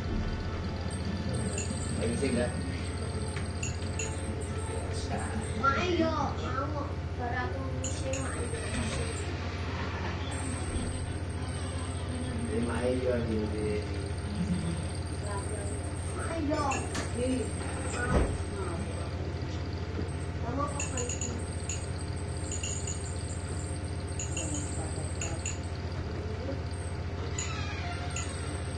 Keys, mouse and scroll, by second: 2.1 shift+Up, 3.5 shift+Down, 3.9 shift+Up, 7.0 click, 8.0 Up, 10.2 click, 11.5-12.5 drag, 13.1 Up, 15.7 click, 16.9 click, 19.2 click, 20.6 click, 22.7 click, 24.2 click, 26.0 ctrl+g, 28.6 click.